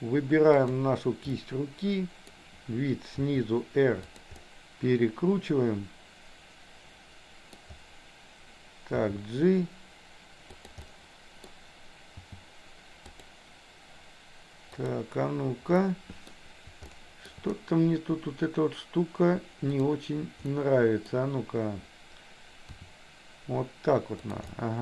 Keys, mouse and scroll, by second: 0.5 click, 1.3-2.4 middle drag, 3.3 r, 4.4-7.5 middle drag, 9.0 g, 10.9 middle click, 14.8 click, 15.8 middle click, 16.9 shift+middle click, 20.5 middle click, 22.8 r, 24.5-24.8 middle drag.